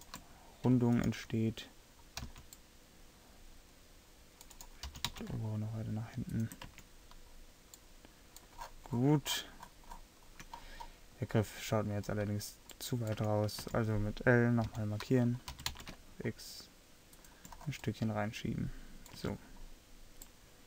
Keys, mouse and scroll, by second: 1.1-2.4 middle drag, 2.4 c, 5.0 g, 6.9 Tab, 13.3 Tab, 13.8 a, 14.8 l, 15.6 g, 19.3 Tab.